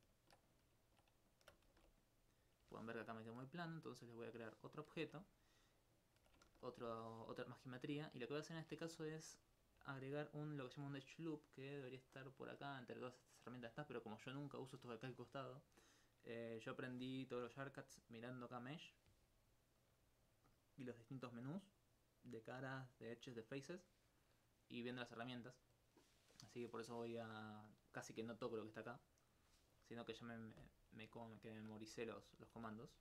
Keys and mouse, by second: 2.0 click, 2.4 right click, 3.1 alt+click, 4.8 alt+click, 6.5 ctrl+z, 7.5 alt+click, 9.2 alt+click, 9.9 alt+click, 30.0 middle click, 30.5 ctrl+alt+click, 32.9 ctrl+click.